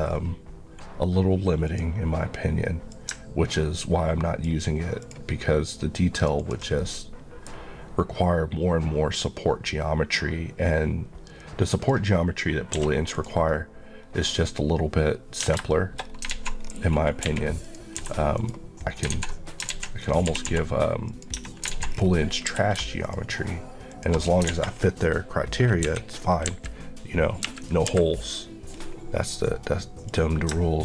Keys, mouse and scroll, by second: 1.7 click, 6.2 ctrl+Left, 6.8 middle click, 11.8 click, 12.8 q, 13.2 click, 14.1 scroll up 1, 15.5 Tab, 15.8 shift+middle click, 16.1 scroll up 1, 16.4 alt+z, 16.7-17.3 scroll up 1, 17.3 1, 17.7 click, 18.1 g, 18.4 right click, 19.0 scroll down 1, 19.2 alt+z, 20.1 click, 20.5 typing, 21.1 click, 21.4 Tab, 21.8 alt+z, 22.0 scroll down 1, 23.1 shift+click, 24.3 scroll down 1, 24.8-25.9 alt+scroll down 2, 25.9 KP_1, 26.5 KP_3, 28.8-29.3 scroll up 1, 29.3 click.